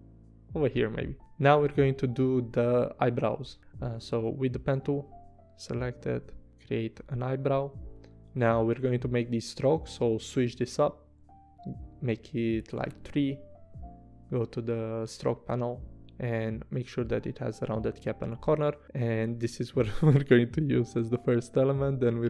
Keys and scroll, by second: 6.9 v, 20.6 p.